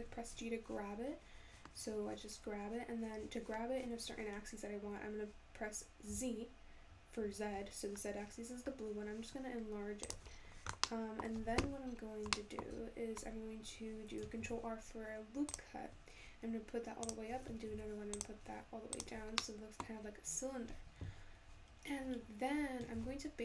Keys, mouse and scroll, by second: 10.3-10.9 scroll down 5, 10.9-11.9 middle drag, 11.9 scroll up 2, 12.4 shift+middle click, 12.8-13.2 scroll up 1, 13.2-14.0 scroll down 3, 14.4 ctrl+r, 17.7 ctrl+r, 19.3 scroll down 1, 19.4 middle click, 20.1-21.3 scroll up 3, 21.3-23.0 scroll down 1, 23.0 ctrl+r.